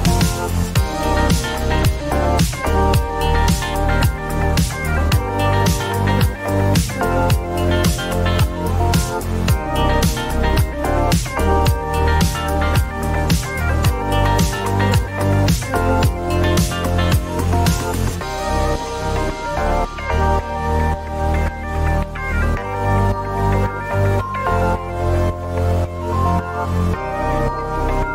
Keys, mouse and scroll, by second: 2.1 click, 2.7-3.9 typing, 5.1-5.9 typing, 8.2-10.0 right drag, 10.0 click, 11.3-12.3 typing, 14.3 click, 16.2 click, 16.9-18.4 typing, 19.7 click, 20.9 click, 21.1 click, 24.6 click, 25.9 click.